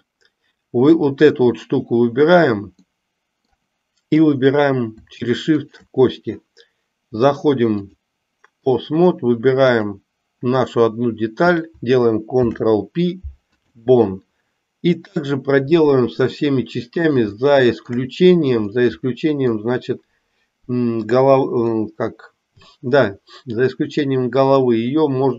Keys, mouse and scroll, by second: 2.8 middle click, 5.5 shift+click, 7.9-8.8 drag, 12.3 ctrl+p, 16.5 middle click, 17.4 shift+middle click, 18.8 middle click, 21.8 middle click, 24.5-25.3 middle drag.